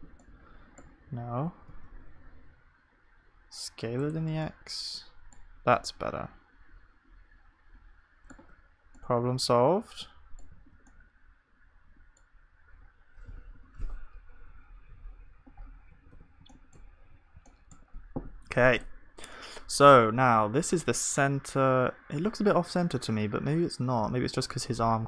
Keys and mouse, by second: 6.9 middle click, 8.5 Tab, 10.6 ctrl+s, 13.6 KP_0, 16.1 ctrl+s.